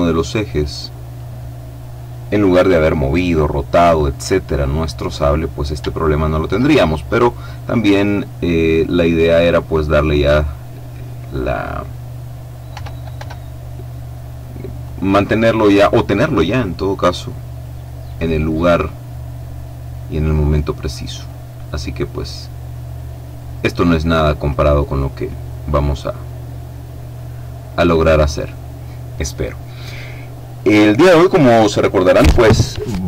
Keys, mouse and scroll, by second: 3.0-5.2 middle drag, 5.2-5.8 scroll up 4, 5.8 shift+click, 7.0-7.6 scroll up 2, 7.6-8.8 scroll down 2, 8.8-11.3 drag, 12.7 r, 13.1 y, 14.7 click, 16.3-18.0 drag, 17.7 right click, 21.2-22.7 drag, 22.5 right click, 24.4-28.9 drag.